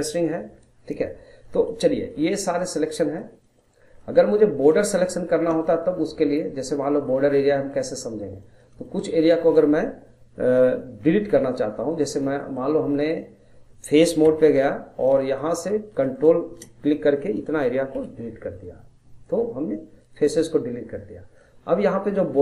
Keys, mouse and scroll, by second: 0.1 middle click, 0.5-1.1 scroll down 1, 1.1 scroll up 2, 1.4-3.1 middle drag, 3.1 scroll up 1, 3.4 middle click, 3.8 scroll down 1, 4.0 middle click, 4.4 scroll up 1, 4.7-7.3 middle drag, 7.3 scroll up 1, 7.6 middle click, 7.9-8.2 scroll down 1, 8.2-11.0 middle drag, 11.0-11.3 scroll down 1, 11.3 middle click, 12.1 scroll up 2, 12.4 middle click, 12.7 scroll up 1, 12.9-14.2 middle drag, 14.2 3, 15.2 click, 16.0 shift+click, 16.2-17.2 shift+drag, 17.2 middle click, 18.0 Delete, 20.9-22.4 middle drag.